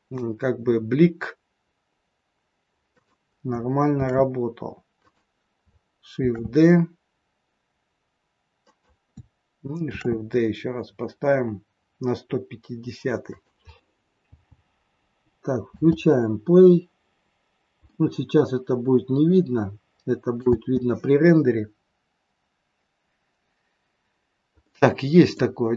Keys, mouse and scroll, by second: 4.1 shift+d, 6.3 shift+d, 9.8 shift+d, 14.2 v, 15.8 space, 16.3 scroll down 3, 17.2 scroll up 1, 17.9 middle click, 20.5 space, 23.3 scroll up 1, 23.5-24.5 scroll down 4, 24.5 middle click, 24.5-24.9 scroll down 1.